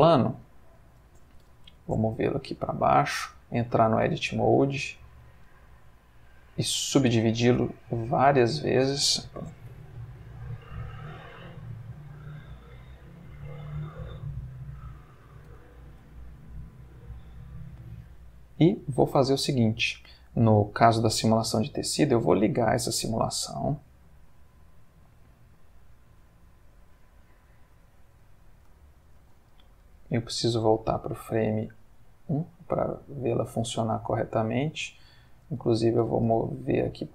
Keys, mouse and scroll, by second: 0.1-0.9 middle drag, 1.4 g, 1.7 z, 2.8 click, 3.3 Tab, 4.0 s, 4.9 click, 5.3 right click, 6.6 click, 7.8 click, 9.6 a, 10.0 right click, 10.5 click, 11.5 click, 12.2-13.4 drag, 13.9-15.3 middle drag, 15.3 scroll, 15.5 Tab, 16.1-19.4 middle drag, 19.4-21.1 scroll, 21.1 scroll up 1, 22.7 click, 24.8-26.6 middle drag, 26.6 scroll, 26.7 Tab, 27.6 Tab, 28.8 ctrl+middle click, 30.3-31.5 drag, 32.3-33.4 middle drag, 35.3 Tab, 36.0 g, 36.3 z.